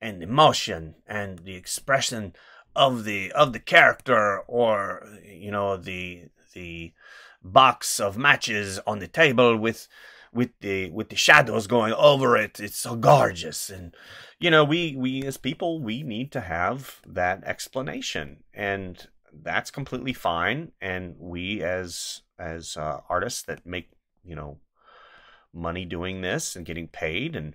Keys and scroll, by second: 1.1 space, 3.7 space, 14.1 space, 19.9 space, 23.5 space.